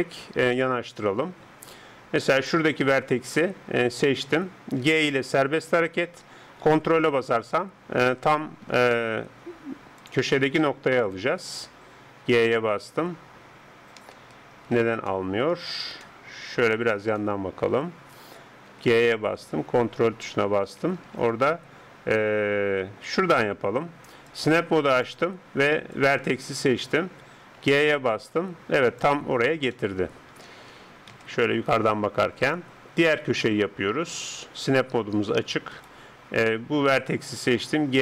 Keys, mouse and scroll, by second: 2.4-3.9 scroll up 1, 3.9-4.8 scroll down 1, 4.8 g, 10.0-12.2 drag, 12.2 g, 15.1-19.1 middle drag, 18.7 g, 24.3-26.9 drag, 27.6 g, 29.8-31.2 middle drag, 31.2 KP_7, 32.5-36.4 middle drag, 36.4 right click, 37.9 g.